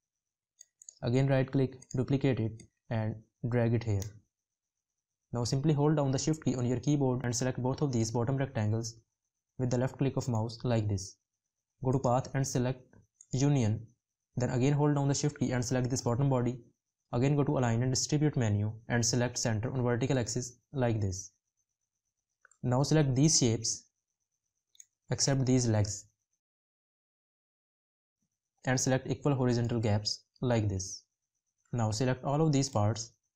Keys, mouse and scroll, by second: 6.1 shift+click.